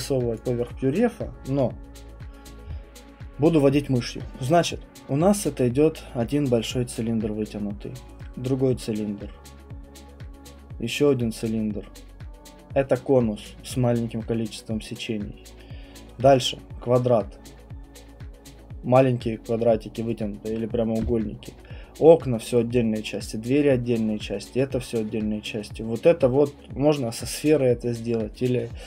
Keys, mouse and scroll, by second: 0.3 click.